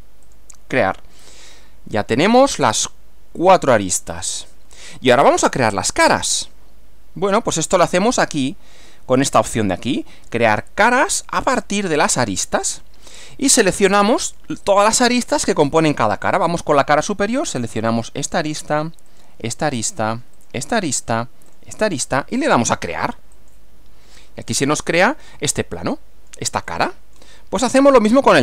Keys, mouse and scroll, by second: 0.3 click, 1.2-2.7 middle drag, 3.4 click, 4.1 click, 5.2-7.7 middle drag, 11.4 click, 18.0 click, 19.1 ctrl+click, 20.4 ctrl+click, 21.5 ctrl+click, 23.4 click, 24.5-26.5 middle drag, 26.6 middle click, 27.6-28.4 middle drag.